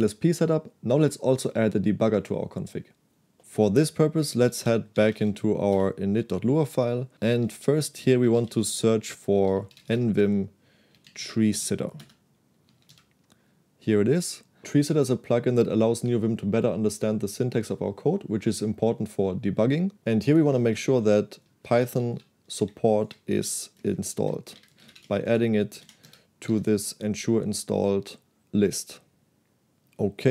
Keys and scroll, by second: 4.4-5.7 typing, 5.8 Return, 7.4-13.4 typing, 12.1 Return, 20.3-26.0 typing, 23.8 Delete, 23.9 Delete, 26.6 Escape.